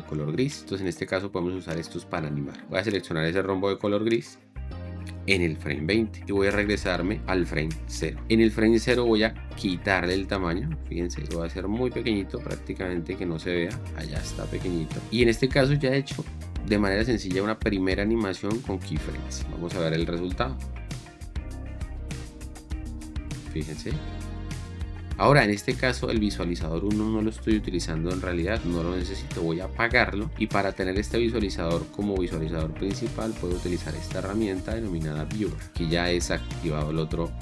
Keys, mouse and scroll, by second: 8.1 Return, 20.9 space, 28.9 1.